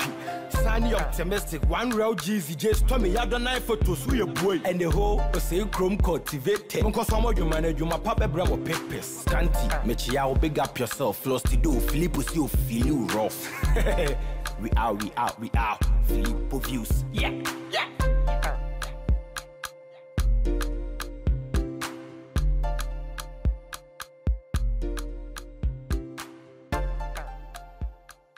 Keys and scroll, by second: 13.6 ctrl+t, 21.3 ctrl+j, 24.9 ctrl+t.